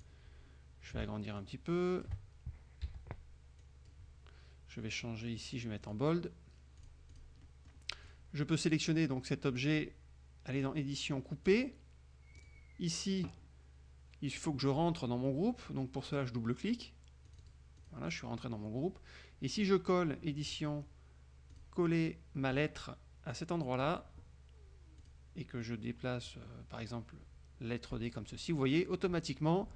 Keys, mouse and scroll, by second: 0.1 click, 1.5 ctrl+shift+click, 3.0 t, 3.8 click, 5.0 click, 6.0 click, 6.9 click, 8.2 click, 10.7 click, 11.6 click, 12.5 click, 17.4 click, 17.9 click, 20.6 click, 21.7 click, 22.8-24.2 drag, 25.2 click, 25.8-28.2 drag.